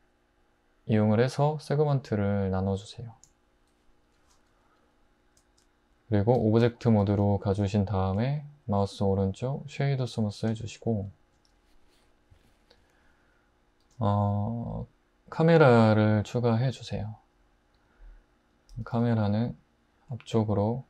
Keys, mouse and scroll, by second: 3.3 Return, 6.4 Tab, 8.6 right click, 13.8 shift+a, 17.8 click, 18.8 typing.